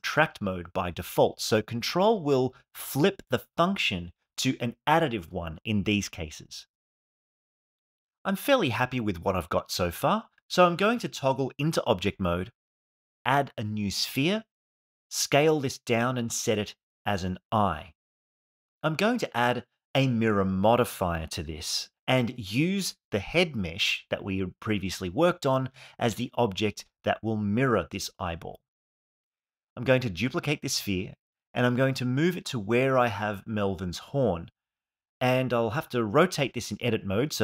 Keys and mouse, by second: 0.4 click, 0.7 click, 1.5 f, 2.9 KP_3, 3.1 f, 5.1 KP_1, 5.4 click, 5.6 click, 6.9 click, 7.9 alt+middle click, 8.9 KP_1, 9.3 ctrl+Tab, 11.6 shift+a, 14.6 s, 16.3 g, 17.0-17.4 middle drag, 17.7 g, 17.8 y, 19.1 KP_1, 20.7 click, 21.6-24.5 drag, 25.7 click, 26.3 click, 29.1 shift+d, 29.7 Tab, 30.2 r, 30.3 x, 30.4 9, 30.6 click, 30.6 0, 31.1 Tab, 31.7 g, 32.2 middle drag, 32.6 g, 32.7 y, 33.2-33.7 middle drag, 33.8 KP_1, 34.2 g, 35.2 ctrl+Tab, 36.7 f.